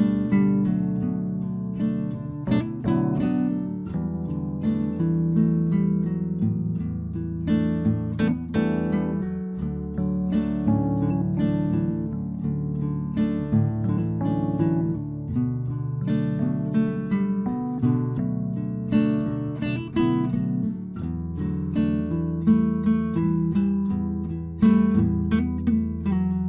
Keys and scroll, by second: 4.8 Return, 13.9 Delete.